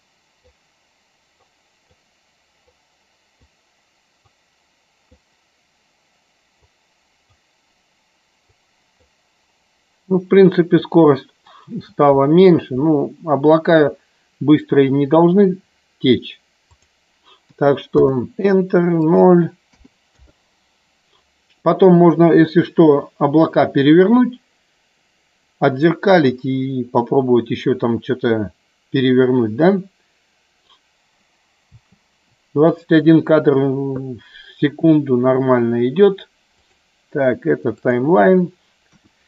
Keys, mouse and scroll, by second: 1.4 click, 2.6 click, 4.3 click, 6.6 click, 8.5 click, 16.7-18.2 drag, 19.0-20.1 drag, 31.6 space, 36.7-37.8 drag, 38.9 KP_1.